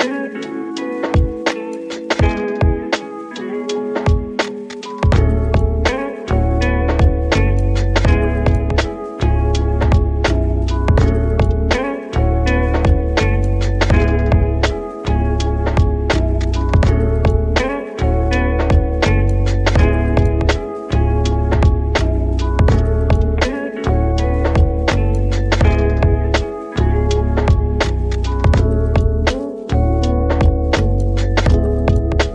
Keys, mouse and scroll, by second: 0.0-1.6 drag, 1.6-2.6 scroll down 2, 2.6 z, 3.7 z, 4.5 scroll up 3, 5.5 scroll down 1, 5.8 middle click, 6.2 click, 6.6 shift+a, 7.9 click, 8.0 shift+a, 9.0 click, 9.0 s, 9.8 click, 10.0 g, 10.3 z, 11.3 click, 11.7 s, 12.0 z, 12.5 click, 12.6 s, 13.7 click, 14.0-14.3 scroll up 5, 14.3 shift+middle click, 15.0 s, 15.4 click, 15.5 s, 15.8 z, 17.4 click, 17.9 ctrl+3, 18.3 Tab, 18.6 scroll up 4, 19.1-21.6 shift+middle drag, 20.6 click, 21.6 ctrl+r, 21.9-22.2 scroll up 1, 22.2 click, 22.4 right click, 22.8 s, 23.0 z, 24.7 click, 25.1-25.5 scroll down 4, 25.5 Tab, 25.9-27.9 middle drag, 27.9 scroll down 2, 28.1-31.1 middle drag, 31.1-32.3 drag.